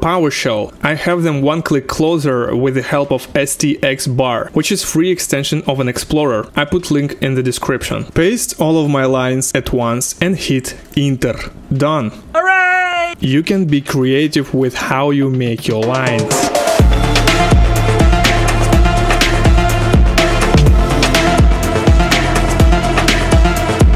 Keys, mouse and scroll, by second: 0.0 click, 1.0 ctrl+v, 1.9 Return, 8.5 Return, 8.5-11.0 drag, 11.0 click, 13.1 click, 13.6-15.0 drag, 15.4 click, 16.4 ctrl+v, 16.9-17.4 ctrl+alt+Up, 17.3-18.9 typing, 19.5 End, 20.5 space, 21.5 KP_2, 21.7 KP_0, 22.4 space, 23.2 ctrl+v.